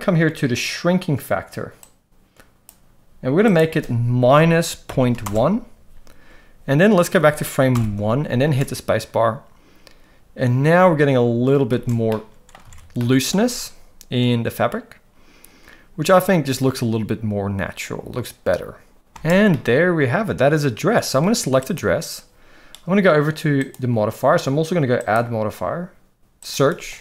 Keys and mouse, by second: 1.9 click, 3.6-5.3 drag, 7.7 shift+Left, 8.5 space, 11.7 space, 12.1-12.5 middle drag, 12.6 alt+a, 12.9-13.3 middle drag, 13.4 space, 19.2 space, 19.5-20.9 middle drag, 21.6 click, 25.0-27.0 drag.